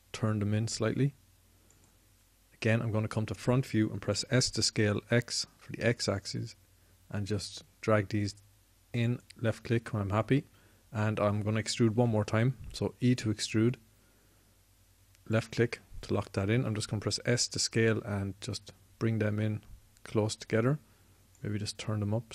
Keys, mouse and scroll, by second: 4.9 s, 10.3-12.8 drag, 12.8 e, 16.2 click, 17.3 s, 21.1-22.3 drag.